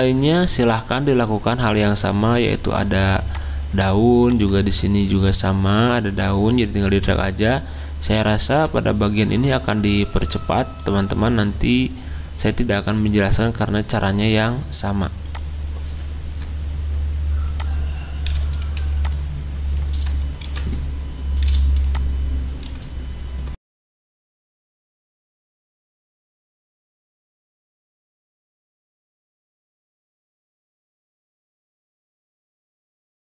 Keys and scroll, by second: 6.9 alt+Tab, 8.5 alt+Tab, 18.7 w, 20.4 ctrl+d, 25.2 ctrl+j, 26.6-27.9 typing, 28.6 ctrl+j, 29.7-30.6 typing, 33.1 w.